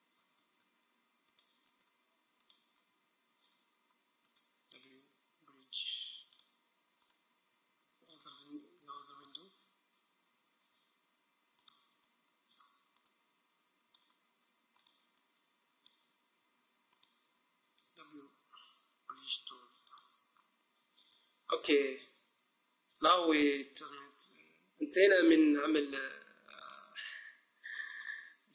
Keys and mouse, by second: 1.4-3.6 right drag, 3.0 middle click, 5.2 right click, 5.2 w, 10.9-14.6 middle drag, 11.7-14.6 right drag, 14.8 middle click, 15.5-16.7 middle drag, 15.5 right click, 17.1-18.6 right drag, 17.9 w, 18.6 middle click, 20.5-21.9 middle drag, 23.6 Tab, 27.9-28.5 right drag.